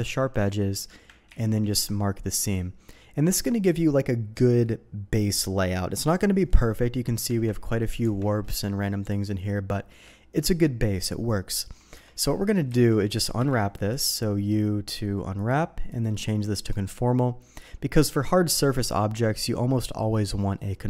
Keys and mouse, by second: 1.3 ctrl+e, 7.2 Tab, 7.6 middle click, 8.0 Tab, 8.5 shift+middle click, 9.1 shift+middle click, 11.9 Tab, 12.3 shift+middle click, 12.7 a, 13.4 u, 15.3 click, 15.9 click.